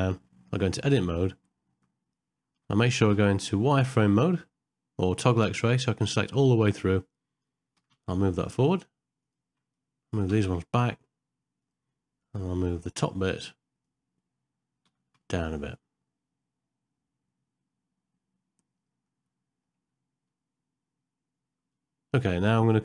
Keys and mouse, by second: 0.5 Tab, 1.7 1, 2.1 ctrl+z, 2.1 KP_1, 3.1 z, 6.7 click, 9.9 click, 12.3-13.9 drag, 19.1 middle click.